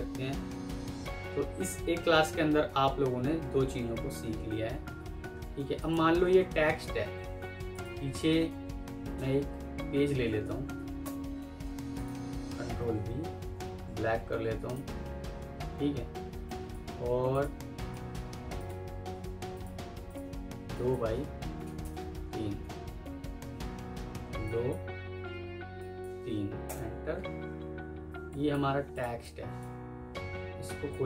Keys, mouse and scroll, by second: 4.3 Escape, 4.8 F4, 6.8 ctrl+c, 9.0 typing, 10.6 Page_Down, 10.9 Return, 12.5 typing, 15.1 F3, 16.7 Escape, 18.8 F3, 21.5 Down, 21.7 Tab, 21.8 Page_Down, 25.0-25.9 typing, 26.5 Return, 27.8 F2, 28.5 Escape, 29.1 double click.